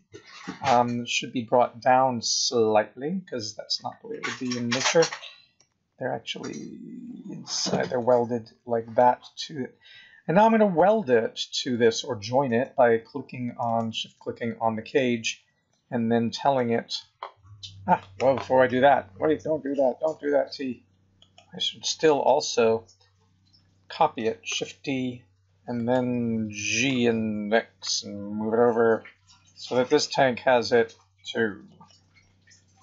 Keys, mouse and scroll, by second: 2.1 KP_1, 2.5-3.5 scroll up 7, 5.0 g, 7.9 middle click, 8.9-9.3 scroll down 4, 10.1 scroll up 2, 10.7-11.4 scroll down 4, 11.9 shift+middle click, 13.6 shift+click, 15.0 scroll up 2, 15.3 scroll down 3, 15.7 middle click, 21.2 click, 24.5 shift+d, 26.8 g.